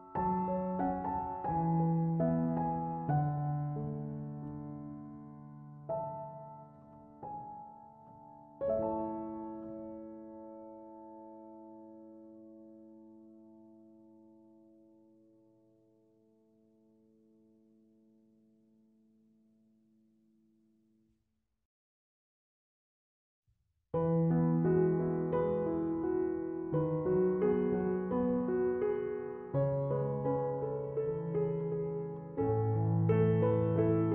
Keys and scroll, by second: 28.8-29.6 typing.